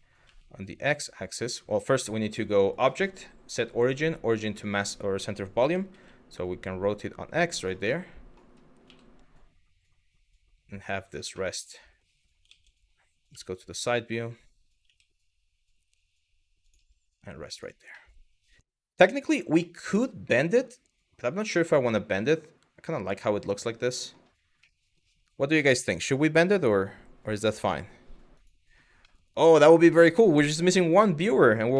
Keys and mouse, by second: 2.3-4.3 drag, 5.2 r, 5.5 x, 7.3 click, 7.6-8.0 middle drag, 8.5 g, 10.7 click, 11.0-11.6 middle drag, 12.2 ctrl+z, 12.9 KP_3, 14.5 g, 16.3 click, 17.2 click, 17.6-18.3 middle drag, 18.8 middle click, 19.2-21.5 middle drag, 21.8-23.8 middle drag, 24.4 middle drag, 28.0 click, 28.7-29.1 middle drag, 30.6-31.0 middle drag, 31.5 middle click.